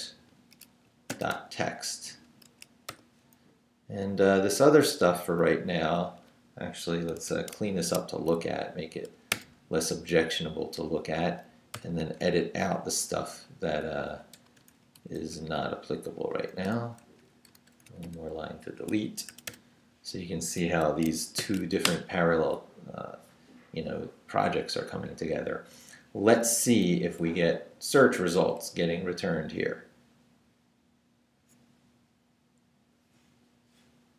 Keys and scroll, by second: 0.0-2.9 typing, 3.3 Left, 5.5 Up, 7.2 Escape, 7.8 shift+v, 8.1 shift+Down, 9.3 d, 9.8 Down, 10.7 Up, 11.7 i, 12.4 shift+3, 12.9 shift+Left, 13.2 Down, 13.9 Up, 14.5 shift+3, 14.7 shift+Left, 15.0 Down, 16.3 shift+Down, 16.5 shift+3, 16.8 shift+Left, 17.0 Up, 17.5 shift+3, 17.8 shift+Down, 18.8 Escape, 19.3 d, 20.6 Escape, 21.1-22.1 typing, 26.0 Up, 27.2 Right.